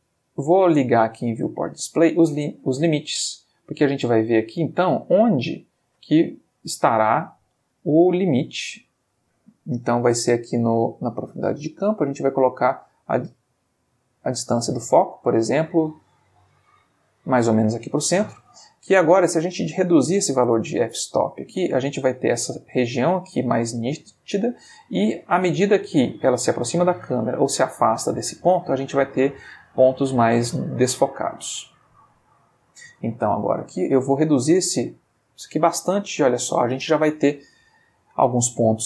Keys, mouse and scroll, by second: 0.2 click, 2.0 click, 3.2-4.2 middle drag, 4.3-5.6 ctrl+middle drag, 11.1 click, 12.1-14.4 drag, 14.7-17.5 drag, 31.4 click, 32.2 ctrl+middle click, 34.0 click.